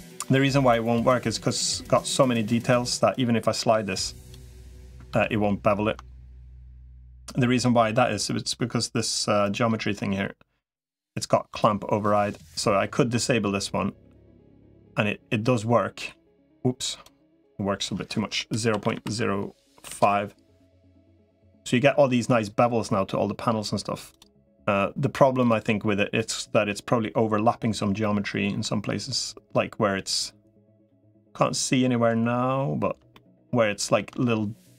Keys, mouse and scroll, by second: 3.1-4.5 drag, 5.5 ctrl+z, 13.5-17.1 drag, 17.3-20.9 drag, 26.0 middle click, 27.8 middle click, 30.7 middle click, 32.9 shift+middle click.